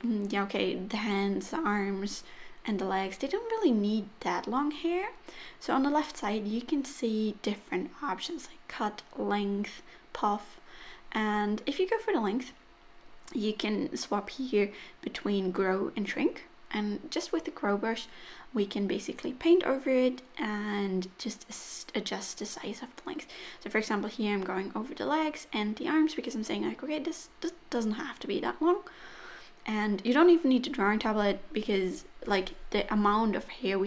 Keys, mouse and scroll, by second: 0.5 shift+middle click, 1.0 middle click, 8.9 click, 11.0 click, 11.5 middle click, 12.2 click, 18.7 middle click, 19.8 click, 20.1 click, 20.3 click, 20.8 click, 22.9 middle click, 23.2 click, 23.4 middle click, 23.7 click, 23.9 click, 24.2 click, 24.7 middle click, 24.9 click, 25.1 middle click, 25.4 click, 26.3 middle click, 26.8 click, 26.9 middle click, 27.3 click, 27.9 middle click, 28.2 shift+middle click, 28.5 click, 30.7 click, 31.0 click, 31.6 middle click, 32.0 middle click, 32.3 click, 33.5 middle click.